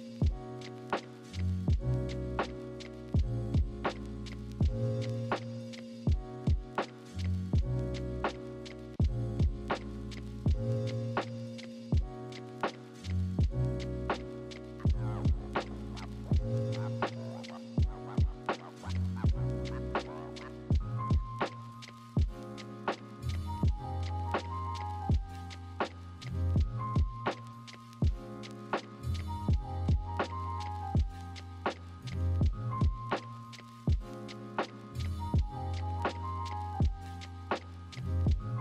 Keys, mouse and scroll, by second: 0.0 ctrl+=, 0.2 ctrl+-, 0.7 ctrl+z, 2.0 ctrl+-, 6.6 ctrl+-, 7.6 ctrl+z, 13.2 ctrl+z, 14.7 right click, 15.8 b, 16.3 ctrl+z, 17.6 ctrl+z, 19.4 ctrl+z, 19.6 ctrl+=, 22.3 ctrl+-, 36.1 ctrl+z, 37.2 ctrl+z.